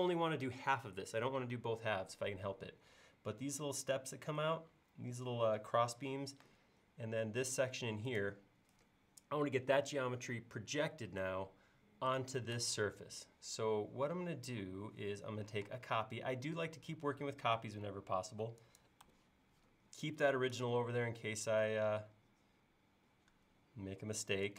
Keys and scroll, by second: 15.7 m.